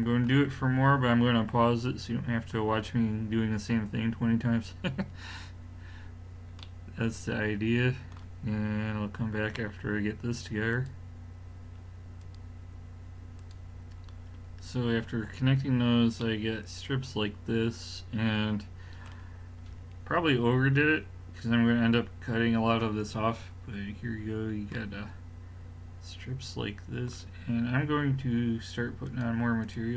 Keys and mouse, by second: 14.5-16.2 middle drag, 19.9-23.8 middle drag, 29.1-29.9 drag.